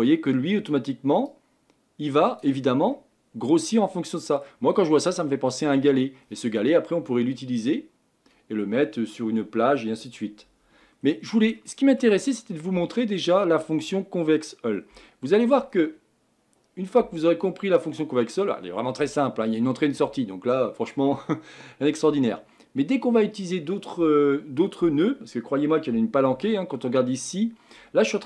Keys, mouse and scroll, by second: 2.9-4.7 middle drag, 4.7-5.1 scroll down 4, 5.1-28.2 middle drag.